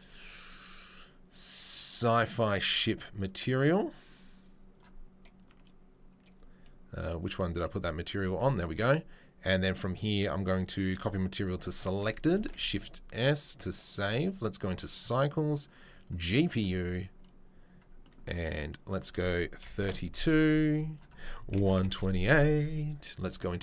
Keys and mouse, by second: 0.6 right click, 2.8-4.7 middle drag, 4.7 right click, 4.8-5.4 middle drag, 5.4 right click, 5.5-7.0 middle drag, 7.0 right click, 7.1-9.7 middle drag, 8.3 a, 9.7-13.4 drag, 12.7 ctrl+s, 13.4-13.9 middle drag, 13.9-15.4 right drag, 15.4-16.5 drag, 16.5-18.9 middle drag, 18.9-23.6 drag.